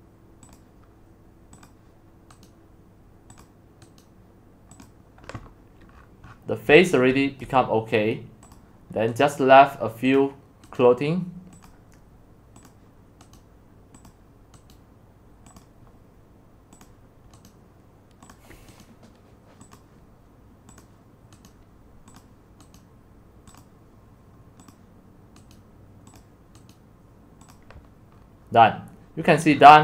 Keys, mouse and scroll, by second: 3.4 right click, 4.8-5.9 drag, 5.9-6.7 scroll down 15, 7.4-9.2 drag, 9.2 right click, 10.2 click, 10.8 right click, 11.6-13.4 drag, 13.4 right click, 14.1 click, 14.7 right click, 15.6-17.5 drag, 17.5 right click, 18.3 click, 19.7-21.5 drag, 22.2 right click, 23.6-25.5 right drag, 26.2 right click, 27.0 right click, 27.5 right click, 28.1 click, 28.2-29.8 scroll down 24.